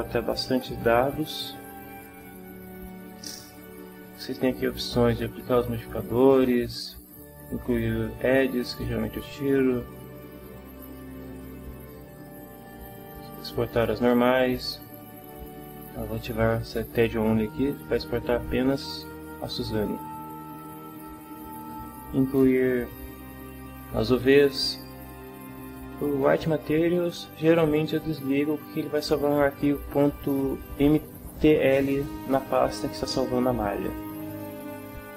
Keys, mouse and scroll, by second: 9.1 click, 13.7 click, 18.9 click, 33.8 click.